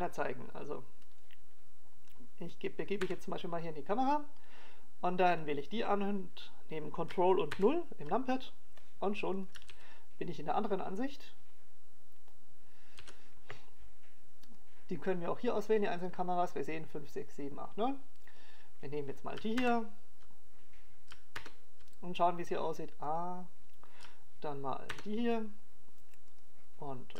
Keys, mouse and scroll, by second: 0.4 right click, 5.1 KP_0, 7.5 right click, 9.7 ctrl+KP_0, 11.5 click, 11.9 alt+a, 16.6 click, 17.3-18.2 scroll down 2, 18.2 scroll down 1, 20.5 click, 21.8 ctrl+KP_0, 23.7 ctrl+KP_0, 25.3 click.